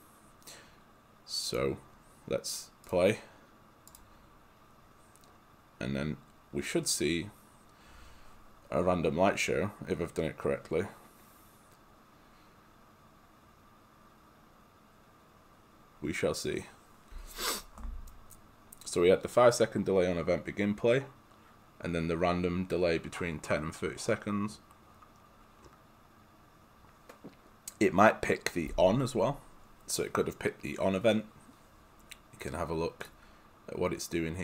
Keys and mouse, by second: 1.5 click, 33.1 click.